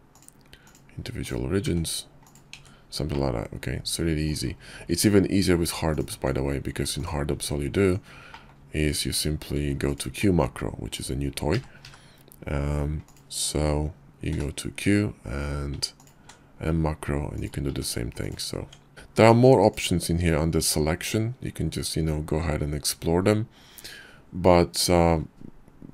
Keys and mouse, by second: 0.8 s, 1.6 Tab, 2.2-3.4 drag, 4.0 Tab, 5.0 click, 5.2 Tab, 6.8 Tab, 7.7 Tab, 10.6 i, 13.4 q, 16.8 s, 17.7 Tab, 18.3 Tab, 18.9-25.2 drag.